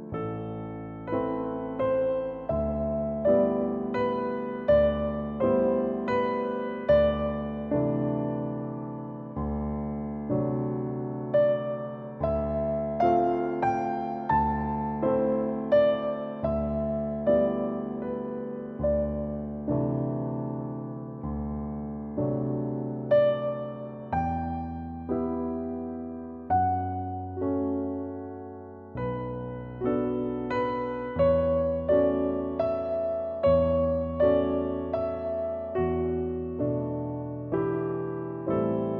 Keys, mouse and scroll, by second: 0.9 Tab, 1.1 Tab, 1.7 click, 2.0 right click, 2.2 click, 2.8-3.1 middle drag, 3.1 KP_1, 3.3 right click, 3.5 scroll up 2, 4.7-5.7 middle drag, 5.8 a, 5.9 middle click, 6.0 e, 7.1 g, 7.7 middle click, 7.8 Tab, 8.0 shift+middle drag, 8.2 ctrl+a, 8.4 right click, 8.5 KP_1, 8.7 shift+middle click, 8.8 Tab, 9.2 i, 10.9-13.3 typing, 12.2 middle click, 13.0 middle click, 14.1 scroll down 4, 14.2 middle drag, 14.5 scroll up 2, 14.6-15.1 shift+middle drag, 15.1 ctrl+a, 15.5 scroll down 1, 15.7-16.1 middle drag, 16.1 right click, 16.5-17.1 drag, 17.8 click, 18.7 click, 19.1 shift+middle click, 19.3 scroll up 3, 19.3 shift+middle click, 19.9 click, 20.3-21.4 drag, 21.8-22.5 shift+middle drag, 22.5 click, 23.6-24.4 drag, 25.5 click, 26.1-26.7 drag, 27.5 middle click, 27.6 Tab, 27.9 right click, 28.3 click, 30.3 click, 30.7 middle click, 32.3 click, 32.8 middle click, 33.5 click, 33.6-34.0 scroll down 3, 34.0-34.6 drag, 34.8 scroll up 1, 35.0-36.2 drag, 36.4 click, 36.5 middle click, 37.5 middle click, 37.9 q, 38.2 Tab, 38.5 click.